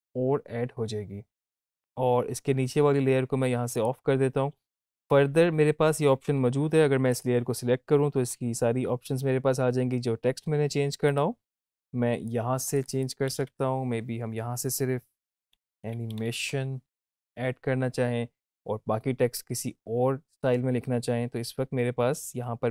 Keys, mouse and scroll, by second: 2.4 click, 7.0 click, 11.0 click.